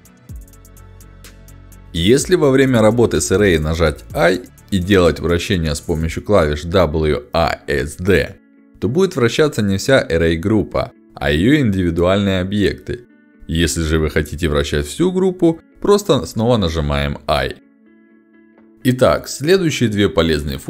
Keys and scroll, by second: 1.0 shift+w, 2.1 i, 3.5-5.9 typing, 7.0 d, 8.4 a, 9.8 d, 11.0 a, 12.7 i, 13.1 d, 15.0 a.